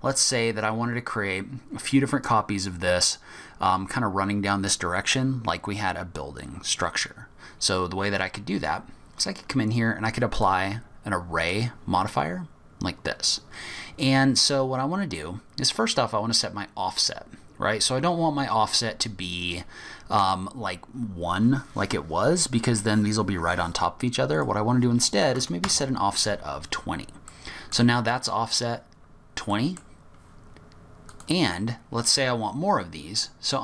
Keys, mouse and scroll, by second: 0.4-1.1 scroll down 3, 0.9 scroll up 1, 8.6-9.2 scroll up 1, 9.2 scroll down 1, 9.4-10.3 scroll up 2, 10.3 click, 16.2 click, 24.3 click, 26.8-27.2 scroll down 3, 27.2 middle click, 28.7 scroll down 2, 29.0-29.5 scroll up 2, 29.5 middle click, 31.1 click.